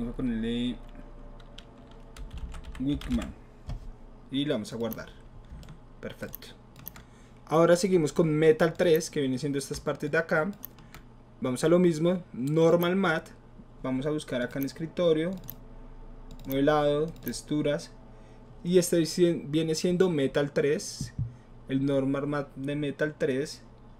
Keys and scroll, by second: 2.0-3.6 typing.